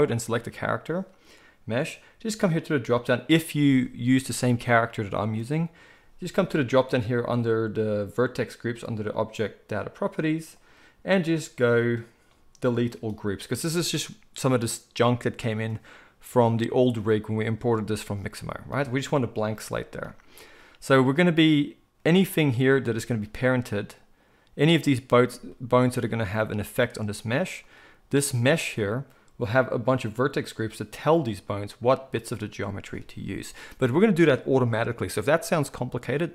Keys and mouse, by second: 0.3-2.5 middle drag, 2.5-22.6 drag, 22.6-36.3 shift+middle drag.